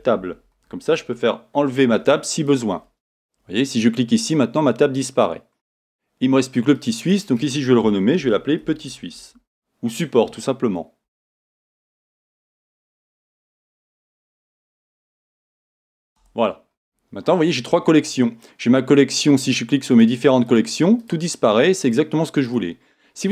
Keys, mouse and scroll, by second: 4.2 click, 4.3 middle click, 5.1 click, 6.7 click, 6.9-15.6 drag, 11.1 BackSpace, 15.0 right click, 16.1 Return, 19.4 click, 19.9 click, 20.4 click, 20.5 middle click, 21.0 click, 21.8 click, 22.4 click.